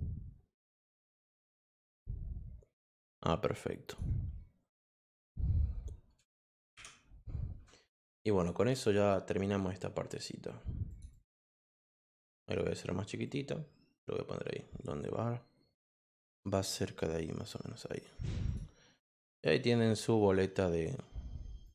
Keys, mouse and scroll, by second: 0.6-3.9 drag, 5.0 click, 6.2 BackSpace, 6.7 i, 8.2 click, 8.5 click, 8.8 click, 10.9 click, 11.1 click, 11.3 click, 11.8 click, 13.2-18.0 drag, 18.4 click, 18.9-19.7 scroll up 2, 21.6 click.